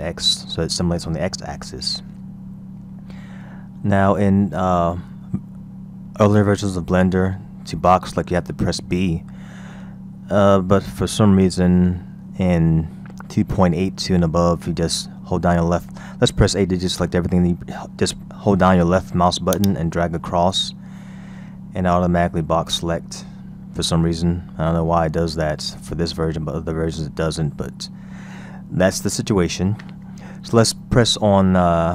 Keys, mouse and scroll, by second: 1.7-4.3 scroll down 2, 10.1-13.2 scroll up 1, 16.8 a, 19.6 click.